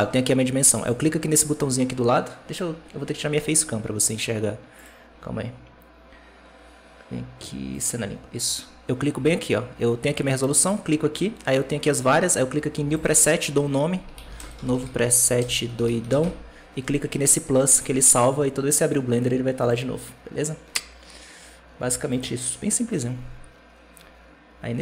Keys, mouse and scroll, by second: 0.6-3.7 drag, 10.5-13.6 drag, 17.7 Escape, 17.8 Escape.